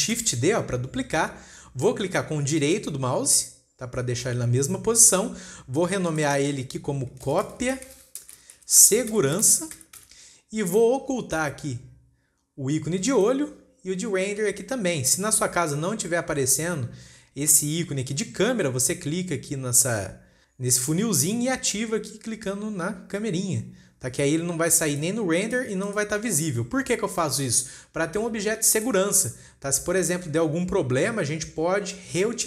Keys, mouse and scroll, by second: 0.6 shift+d, 3.1-4.4 right drag, 4.4 scroll down 1, 4.8 scroll up 3, 6.5 click, 6.7-9.9 drag, 13.6 click, 21.2-24.3 drag, 25.4 click, 25.9 click, 26.3 click, 29.3-30.2 shift+middle drag, 30.2-32.4 scroll down 1.